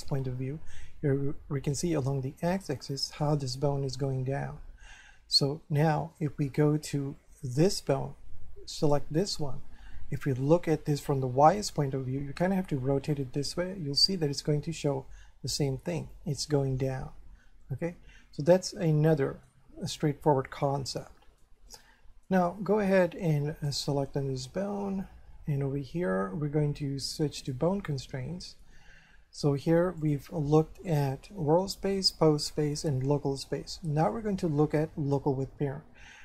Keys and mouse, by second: 4.9 middle click, 6.1 middle click, 8.8 right click, 10.2 middle click, 12.9 middle click, 17.6 middle click, 18.8 middle click, 20.0 middle click, 21.1 shift+middle click, 23.7 right click, 27.4 click, 30.0 click.